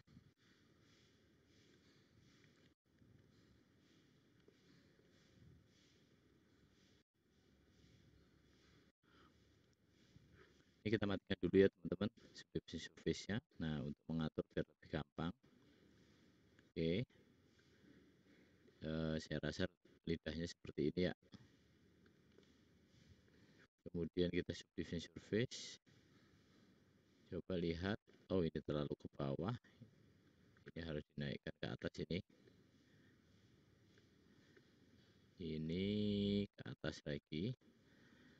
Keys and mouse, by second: 0.6-1.7 drag, 0.6-1.7 middle drag, 0.6-1.7 right drag, 2.7 ctrl+r, 5.9 click, 5.9 middle click, 5.9 right click, 7.0 x, 10.5-11.7 middle drag, 12.6 middle click, 13.4 click, 14.4-15.9 drag, 16.5-17.9 drag, 18.3 click, 19.1-20.5 drag, 21.2 click, 21.2 middle click, 21.2 right click, 24.5 click, 29.5-32.4 drag, 32.9-34.5 drag, 34.9 click, 37.6 middle click, 37.7 middle click, 37.9 middle click.